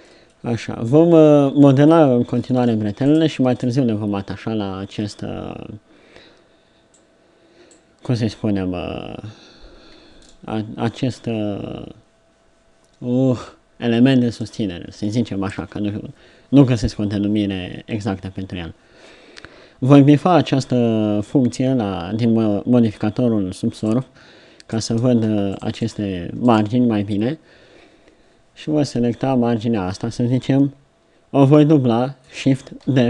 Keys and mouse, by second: 0.9 KP_7, 1.2 middle click, 3.1 click, 3.5 Tab, 4.1-6.7 drag, 7.0 click, 14.4 Tab, 15.0 Tab, 15.5 ctrl+Tab, 25.1 ctrl+Tab, 25.8-28.3 drag, 31.6 middle click, 32.9 shift+d.